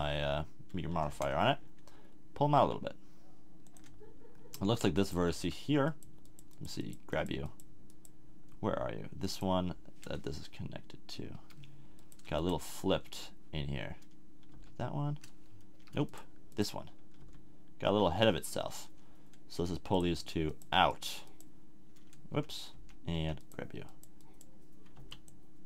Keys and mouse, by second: 1.0 g, 3.7 click, 5.3 z, 8.6-11.3 middle drag, 12.0-13.0 middle drag, 13.0 z, 14.5 g, 17.2 g, 22.3 a, 22.7 a, 23.2 a, 24.9 b.